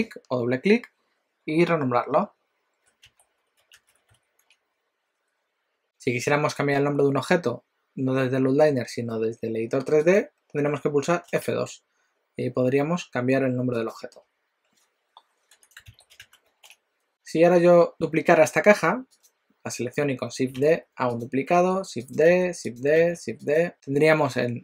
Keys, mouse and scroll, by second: 10.2 click, 11.3 F2, 19.1 click, 20.7 shift+d, 21.7 shift+d, 23.1 shift+d, 23.7 click.